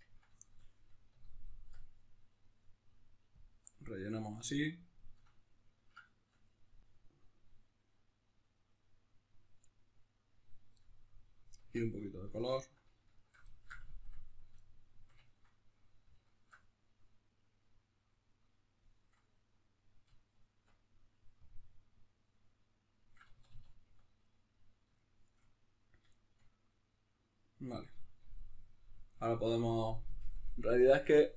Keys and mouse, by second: 1.7 Tab, 3.4 click, 3.8-9.7 middle drag, 9.7 click, 10.8-12.4 middle drag, 11.7 Tab, 12.4-13.5 alt+right drag, 13.5-16.2 shift+middle drag, 16.2 alt+shift+right click, 16.8-21.5 middle drag, 20.6 Tab, 21.5 click, 21.8-31.3 middle drag, 23.3 a.